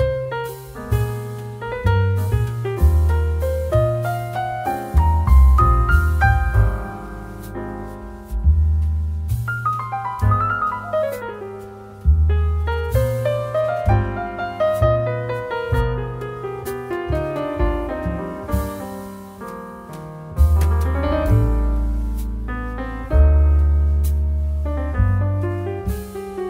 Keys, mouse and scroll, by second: 3.1 click, 9.1 click, 14.3 click.